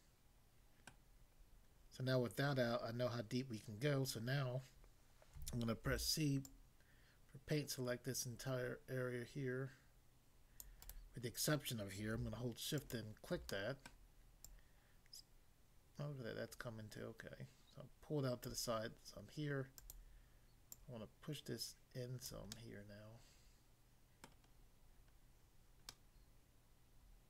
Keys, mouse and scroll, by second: 1.0 middle click, 1.4-2.2 scroll up 1, 5.4-5.9 typing, 6.4 click, 10.6 click, 10.8 right click, 12.8 shift+click, 13.5 middle click, 13.8 middle click, 14.4 click, 18.4 click, 19.8 click, 20.7 click, 22.3 click, 22.6 middle click, 24.3 middle click, 24.5 scroll down 1, 25.2 scroll down 1, 25.9 middle click.